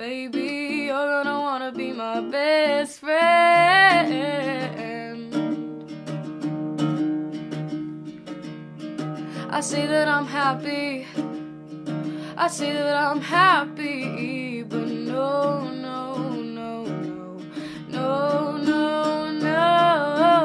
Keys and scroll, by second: 5.0 ctrl+d.